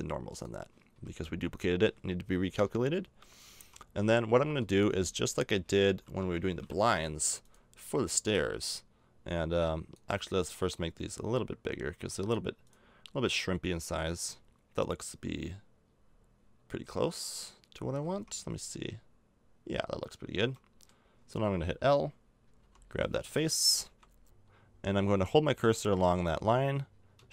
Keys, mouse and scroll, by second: 0.9 a, 2.5 l, 3.6 a, 4.4 l, 5.6 KP_1, 6.2 KP_5, 10.1 right click, 12.6-14.5 right drag, 17.8 a, 18.1 Tab, 20.4 Tab, 22.6 l, 23.8 KP_1, 24.2 l.